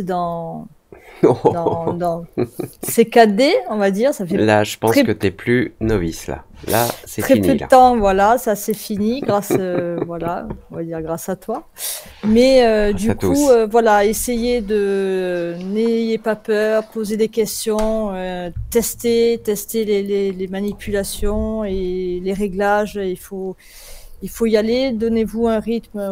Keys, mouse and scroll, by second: 18.7-20.6 alt+drag.